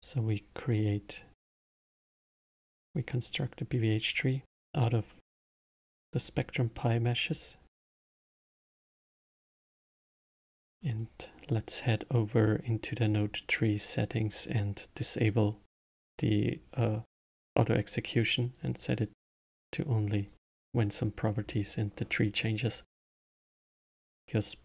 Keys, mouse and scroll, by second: 5.5 click, 6.2-7.3 drag, 8.7 click, 10.9 click, 14.2 click, 18.5 click, 19.4 click, 20.1 click, 24.0 click.